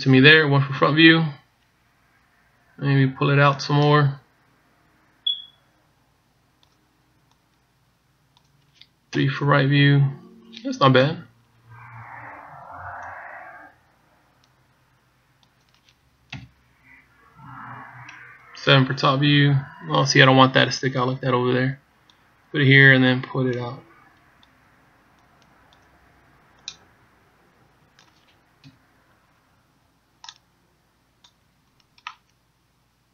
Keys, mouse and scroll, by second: 1.5 KP_1, 4.4 click, 8.3 click, 9.8 KP_3, 10.7-11.0 scroll up 2, 11.7 KP_1, 12.7-13.0 scroll down 1, 13.9 click, 17.0 KP_3, 18.2 KP_1, 19.5 KP_7, 21.7 click, 24.1 click, 26.0 click, 27.5 click, 29.5 KP_1, 31.1 click, 32.8 middle click.